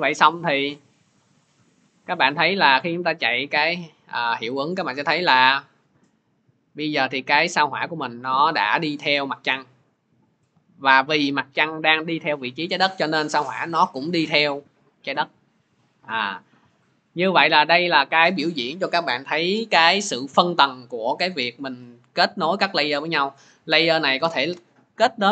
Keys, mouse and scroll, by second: 3.8-4.9 middle drag, 10.8-16.0 drag, 17.4-25.3 drag.